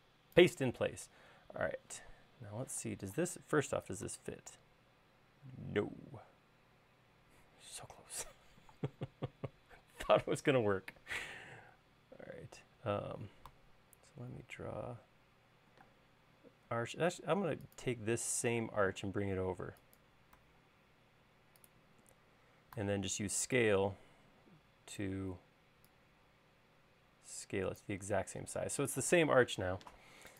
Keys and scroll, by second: 2.9 m, 8.1 space, 14.5 a, 16.1 space, 18.7 m, 22.9 s, 28.4 space.